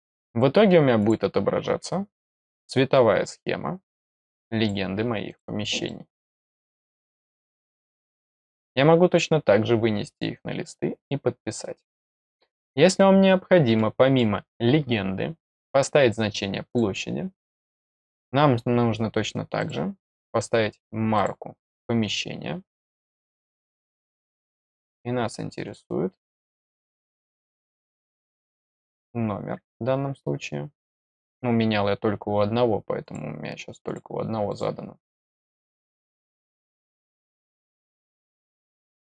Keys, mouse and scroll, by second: 0.9 click, 1.6 scroll down 1, 2.4 middle click, 3.9 click, 5.2 click, 5.8 middle click, 13.7 middle click, 16.6 click, 19.5 click, 21.1 click, 23.5 click, 25.6 click, 27.7 click, 33.0 click, 33.8 click, 34.4 click, 35.6 click, 37.0 click, 37.8 click, 38.9 click.